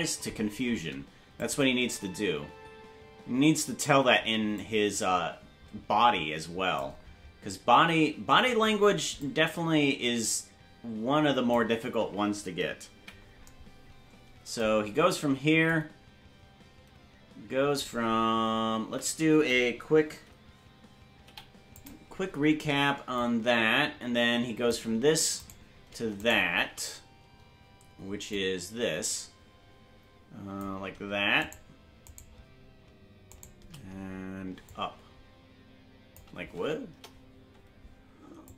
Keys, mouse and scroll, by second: 1.2 space, 1.4 click, 1.7 space, 4.5-6.8 drag, 4.5 space, 9.2-11.5 drag, 12.9 KP_Decimal, 15.7-17.8 drag, 18.9 a, 22.4 i, 23.2-24.7 drag, 26.0 right click, 26.4 shift+right click, 28.3-30.6 drag, 32.2 shift+right click, 34.6-36.2 drag, 34.6 shift+right click, 36.9 KP_0, 38.4 click.